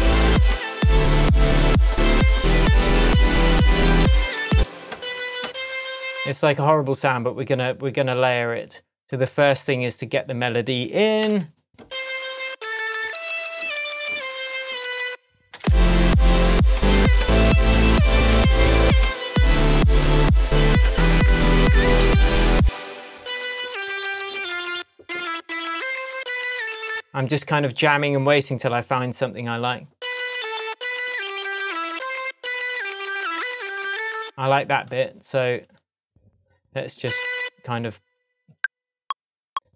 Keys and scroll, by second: 4.5 space, 11.2 shift+super+m, 15.5 space, 22.5 space.